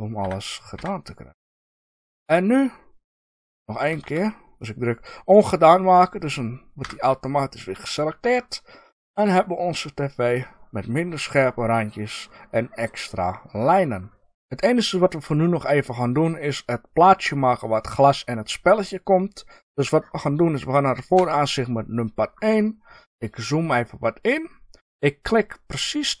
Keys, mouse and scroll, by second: 1.7 click, 2.1-7.8 middle drag, 4.0 ctrl+z, 6.7 f, 7.8 click, 7.9-14.3 middle drag, 8.3 scroll down 1, 21.1 KP_1, 21.2-26.2 middle drag, 22.2-24.3 scroll up 2, 24.3-26.2 scroll up 1.